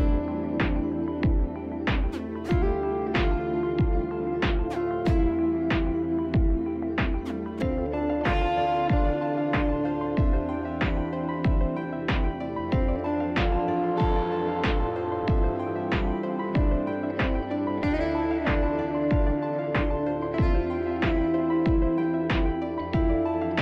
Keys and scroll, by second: 0.0 shift+s, 0.5 shift+s, 0.9 shift+s, 1.9 shift+s, 2.2 shift+s, 3.3 shift+s, 7.1-8.6 typing.